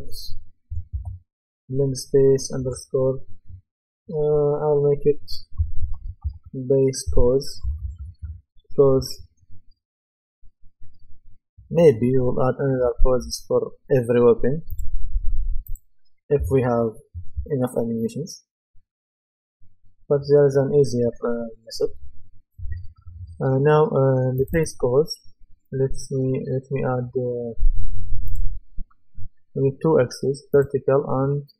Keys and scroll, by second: 5.5-8.7 typing, 13.2 Return.